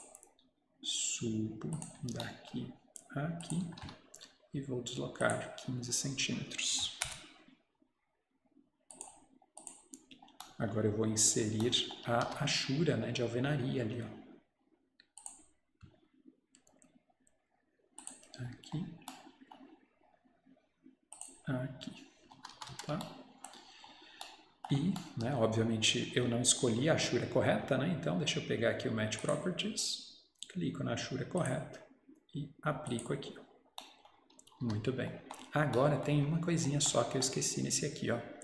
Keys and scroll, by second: 3.7 Escape, 3.8 Escape, 7.1 Return, 9.9 Return, 12.1 Escape, 12.3 Escape, 22.5 Escape, 22.6 Escape, 34.5 Escape, 34.7 Escape.